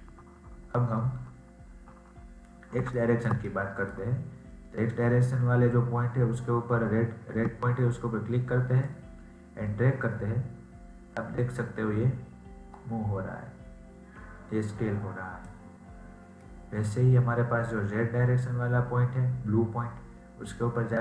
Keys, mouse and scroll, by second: 2.7 scroll down 1, 2.9-6.5 shift+middle drag, 8.7 click, 16.3-19.5 middle drag.